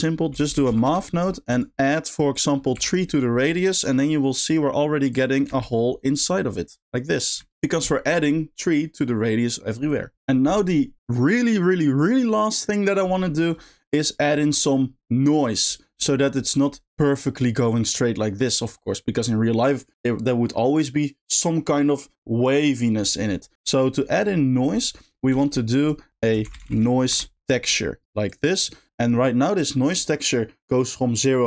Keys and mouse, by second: 2.5 click, 4.4 click, 5.2 click, 5.5 space, 7.6 shift+middle click, 16.0 middle drag, 23.5 middle click, 24.2 middle click, 25.1 middle click, 25.4 shift+a, 28.5 click, 28.8 middle click.